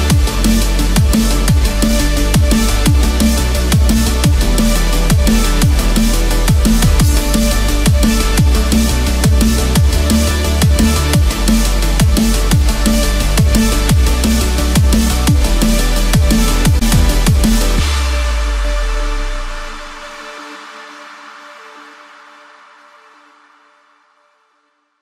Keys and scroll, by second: 6.9 ctrl+=.